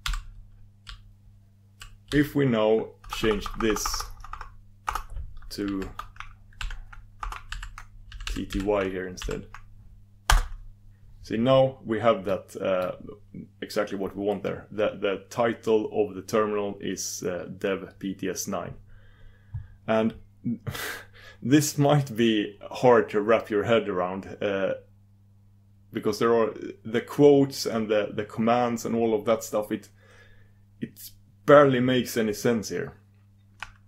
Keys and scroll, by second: 10.5 super+v.